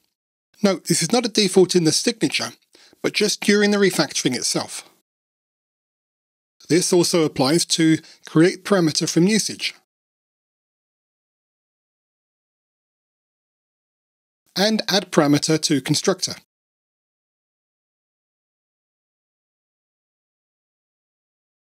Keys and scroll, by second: 2.0 alt+F7, 5.8 super+z, 6.5 super+[, 7.8 Tab, 8.2 Tab, 9.2 alt+Return, 12.1 Escape, 14.0 Delete, 16.0 alt+Return, 18.8 Delete.